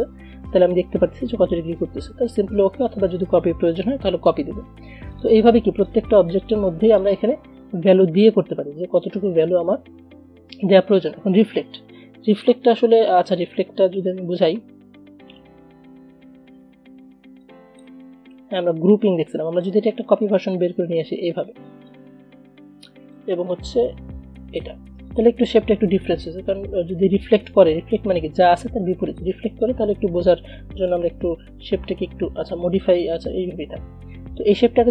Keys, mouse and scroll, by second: 5.2 click, 12.5 click, 17.9-19.5 drag, 20.1-22.3 alt+drag, 23.3-25.3 alt+drag, 29.3-33.7 drag, 33.7 ctrl+g.